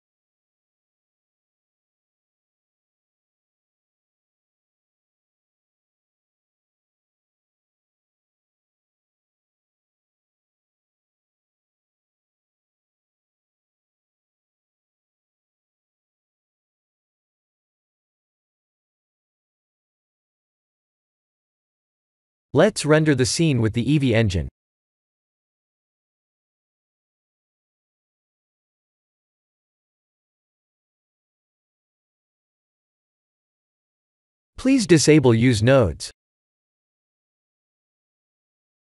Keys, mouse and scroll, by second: 6.4 click, 7.2 g, 9.0 click, 9.9 click, 11.3 g, 14.6 click, 15.0 shift+`, 17.6 click, 19.4 ctrl+s, 21.6 click, 29.3 click, 29.8 click, 38.6 click.